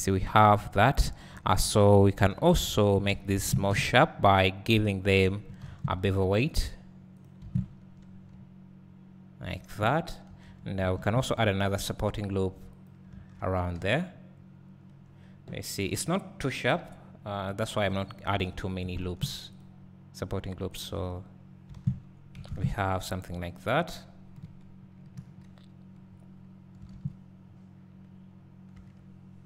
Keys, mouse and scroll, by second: 2.6 alt+click, 3.3 alt+shift+click, 3.7 `, 6.5 ctrl+e, 7.3 click, 7.4 alt+a, 8.4 Tab, 10.9 ctrl+r, 11.4 ctrl+r, 12.8 click, 13.3 Tab, 13.5 scroll down 2, 13.8 `, 17.2 scroll down 2, 17.4 `, 18.0-18.5 scroll up 2, 18.9 ctrl+r, 19.6 ctrl+r, 20.8-21.1 drag, 21.1 Tab, 21.4 scroll down 2, 22.7 `, 24.4 KP_1, 24.6 KP_1, 25.1 KP_3, 25.3 KP_3, 27.5-28.3 scroll up 1, 28.9 Tab.